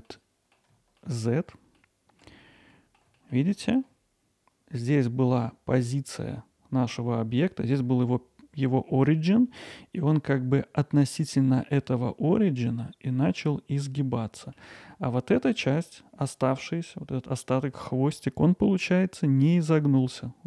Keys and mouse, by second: 0.1-0.5 alt+middle drag, 1.0-1.5 ctrl+alt+middle drag, 1.7-2.2 alt+middle drag, 2.8 alt+middle click, 3.2 middle drag, 3.6 alt+middle click, 9.7-10.0 middle drag, 14.4 middle click.